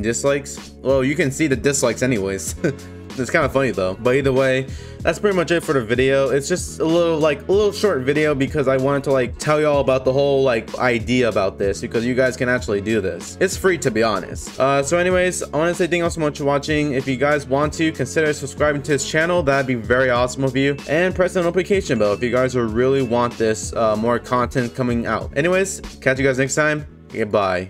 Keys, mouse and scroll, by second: 4.1-5.0 scroll up 4, 9.0 click, 14.3 scroll down 2, 15.8 middle click, 17.9 click, 20.8 click, 22.0 scroll down 1, 22.6-22.9 scroll up 1, 24.2 scroll down 1, 26.0-26.6 scroll up 1, 27.2 click.